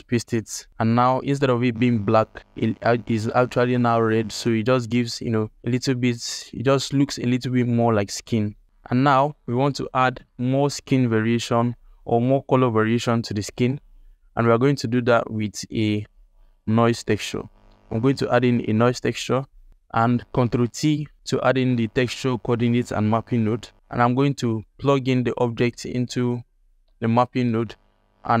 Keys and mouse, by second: 8.7 alt+shift+middle click, 13.7 ctrl+alt+middle click, 14.4 drag, 14.9 g, 16.4 alt+middle click, 16.9 drag, 17.2 shift+a, 20.4 ctrl+t, 20.9 alt+click, 24.9 click, 27.1 alt+shift+click.